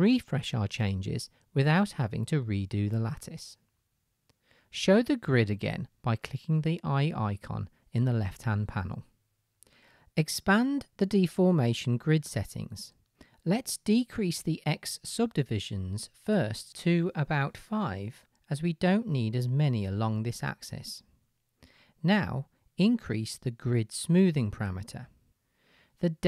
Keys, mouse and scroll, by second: 8.1-10.5 middle drag, 10.5-26.2 drag.